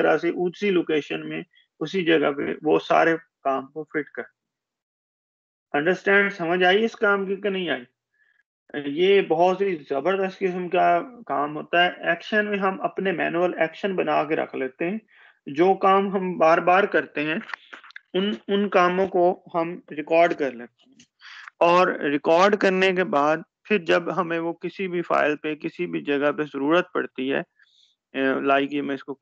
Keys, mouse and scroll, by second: 25.3 shift+click.